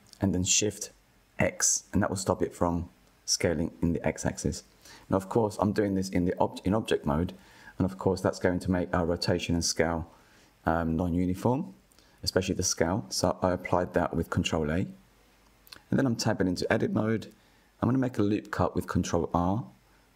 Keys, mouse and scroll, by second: 2.8 ctrl+a, 5.5 ctrl+a, 9.3 scroll down 1, 10.0-10.5 scroll up 1, 11.9 Tab, 13.1 click, 16.4 ctrl+r.